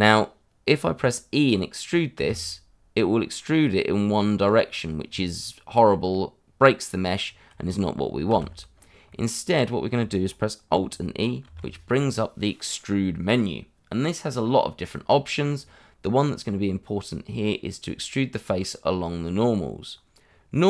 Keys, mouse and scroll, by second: 2.1 e, 4.4 click, 4.6 middle click, 7.2 scroll down 1, 8.3 ctrl+z, 8.7-9.1 scroll up 1, 9.1 middle click, 11.4 alt+e.